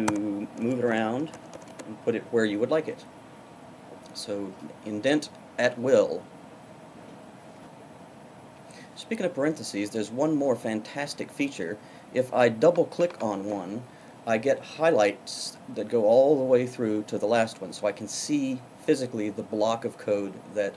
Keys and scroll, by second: 1.3 Tab.